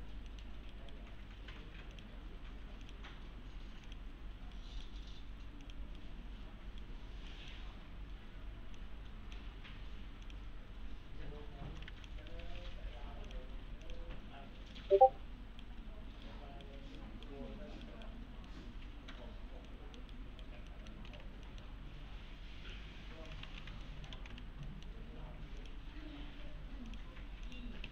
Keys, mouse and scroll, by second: 0.0-0.3 scroll down 1, 0.3 middle click, 0.7 right click, 1.9 click, 4.6 right click, 5.6 click, 6.0-6.9 right click, 7.3 middle click, 8.8-9.4 click, 12.4 ctrl+z, 13.3 click, 14.8-15.7 right click, 18.2 scroll down 1, 18.5-19.4 middle click, 19.3 scroll up 1, 19.7 middle click, 20.1 right click, 20.7 middle click, 21.1 alt+w, 21.5 middle click, 21.7-22.7 scroll down 1, 22.7-23.3 click, 23.5 ctrl+z, 23.8 alt+middle click, 24.1 alt+x, 24.7 middle click, 25.6 click, 27.6-27.9 typing.